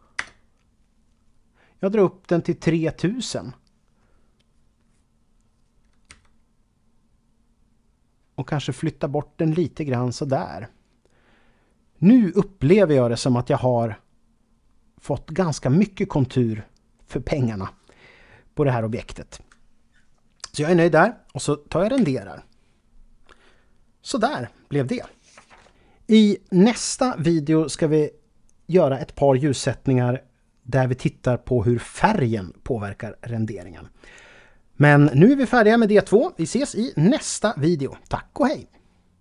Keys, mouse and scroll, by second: 0.2 Return, 6.1 g, 10.2 click, 22.0 F12.